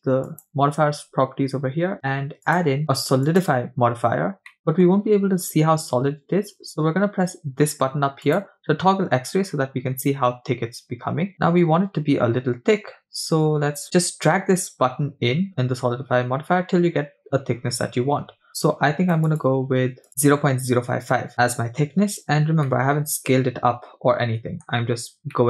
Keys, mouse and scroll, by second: 0.3 click, 2.5-3.6 drag, 4.6 middle click, 4.8-5.7 scroll up 3, 8.2 click, 11.4-21.3 shift+drag, 22.2-22.7 scroll down 2, 22.7-24.8 middle drag, 24.8-25.2 scroll up 3, 25.3-25.4 middle drag.